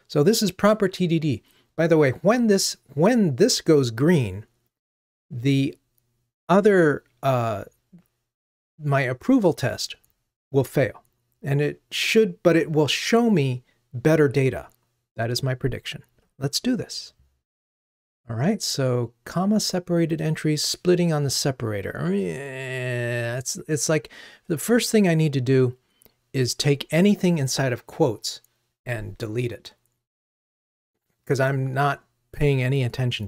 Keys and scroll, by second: 18.4 super+b.